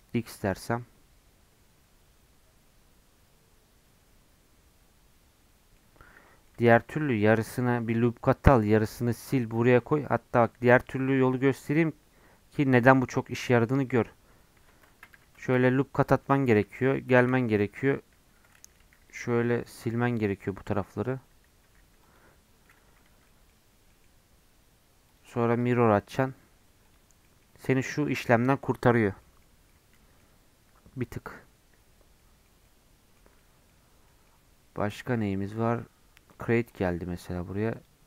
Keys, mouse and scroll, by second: 0.5-3.5 middle drag, 6.2 middle click, 6.5 Tab, 6.8-9.8 middle drag, 10.0 ctrl+z, 11.2 Tab, 11.5-13.5 drag, 13.5-14.6 middle drag, 14.6 Tab, 15.1 Tab, 15.4 ctrl+r, 16.5 1, 17.2 KP_7, 18.8 alt+z, 19.1 click, 21.6 x, 22.6 middle click, 23.0 Tab, 23.2-25.1 middle drag, 25.1-27.2 drag, 27.2-28.8 middle drag, 28.8-29.2 scroll up 4, 29.2 middle click, 29.5 scroll down 1, 29.7-31.6 middle drag, 31.6-32.2 scroll down 5, 32.2-36.3 middle drag, 36.3-38.0 drag.